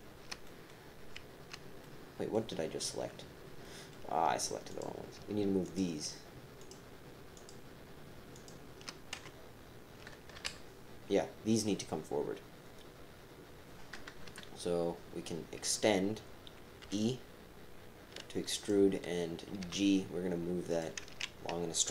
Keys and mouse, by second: 0.4 click, 1.8 click, 3.6 click, 3.7 middle click, 4.7 click, 5.6 shift+click, 6.6 shift+click, 7.3 shift+click, 8.3 shift+click, 9.1 KP_7, 9.2 click, 10.4 KP_1, 14.2 KP_3, 16.8 e, 19.6 g, 21.0 ctrl+z.